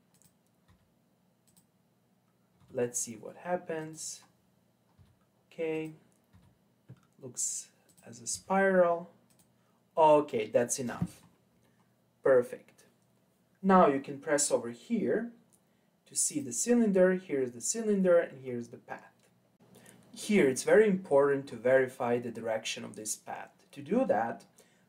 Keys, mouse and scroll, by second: 0.7 e, 2.6 e, 4.2-4.9 scroll down 6, 4.9 e, 6.3 e, 8.3 e, 10.8-14.8 scroll up 8, 16.3 click.